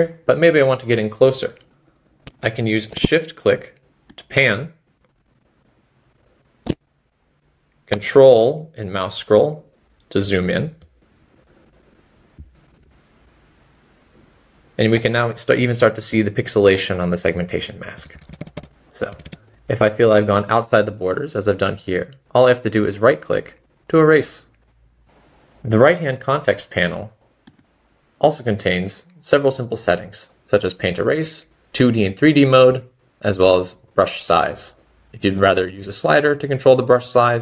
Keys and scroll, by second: 0.2 typing.